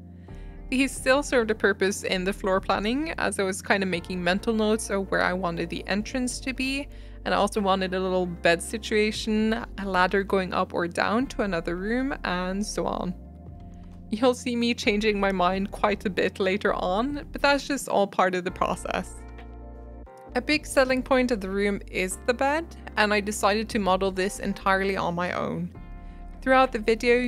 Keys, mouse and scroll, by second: 0.0 middle click, 1.2 middle click, 1.8 click, 2.3 shift+click, 3.0 ctrl+z, 3.2 shift+click, 3.3 shift+middle click, 3.6 shift+click, 3.7 middle click, 3.9 shift+click, 4.1 shift+click, 4.2-5.2 shift+middle drag, 5.2 e, 5.8 middle click, 6.2 click, 6.4 alt+z, 6.4 scroll up 4, 6.5 shift+middle click, 6.7 g, 9.4 middle click, 9.5 scroll down 6, 9.6 middle click, 9.7 scroll up 2, 9.9 Tab, 10.0 scroll down 1, 10.2 middle click, 10.2 Tab, 10.4 click, 10.5 middle click, 10.7 3, 10.9 click, 11.1 middle drag, 11.3 alt+z, 11.5 middle click, 11.8 click, 11.9 click, 12.0 shift+middle click, 12.2 s, 13.6 click, 14.3 s, 15.5 shift+click, 15.7 s, 16.7 shift+middle click, 17.2 Tab, 17.3 scroll down 1, 17.4 middle click, 17.9 Tab, 18.1-23.2 typing, 18.2 click, 18.3 shift+click, 19.1 middle click, 20.2 middle click, 23.8-24.5 middle drag, 24.5 shift+d, 25.5 middle click, 25.7-26.4 scroll up 7, 25.9 shift+middle click, 26.0 click, 26.4 scroll down 2, 26.7 click, 27.0 middle click, 27.1 shift+click.